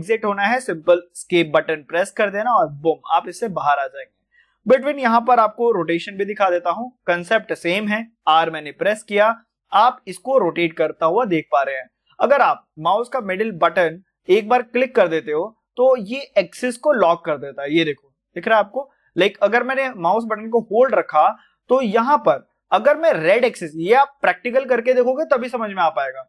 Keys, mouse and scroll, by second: 14.0-26.2 middle drag.